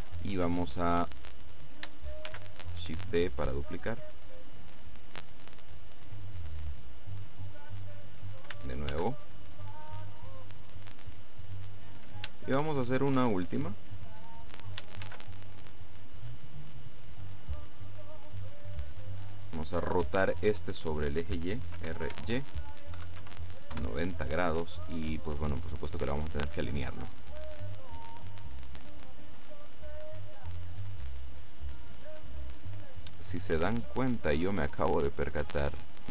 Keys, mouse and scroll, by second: 2.3 shift+d, 8.0 click, 9.0 shift+d, 11.5 click, 12.4-13.9 shift+drag, 15.1 shift+d, 19.0 click, 21.9 r, 22.2 y, 23.1 KP_9, 23.3 KP_0, 23.9 KP_Enter, 25.0-25.3 scroll down 2, 25.3 middle click, 26.9 middle click, 27.9-29.5 drag, 29.3 middle click, 34.7-36.1 drag.